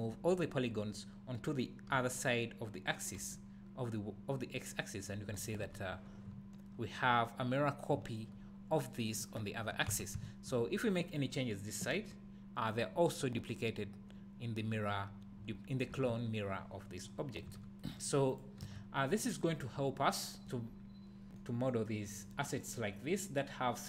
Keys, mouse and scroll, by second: 1.9 f, 3.2 g, 5.4 click, 5.6 Tab, 5.8 scroll down 1, 6.3 `, 7.1 scroll up 1, 7.9 `, 9.9 Tab, 10.2 `, 11.0 click, 11.9 g, 12.8 click, 13.0 scroll down 1, 15.9 Tab, 17.1 scroll up 1, 17.5 Tab, 18.3 click, 18.6 Tab, 20.2-23.8 middle drag, 20.6-21.4 scroll up 2, 21.9-22.3 scroll down 2, 23.0-23.8 scroll down 2.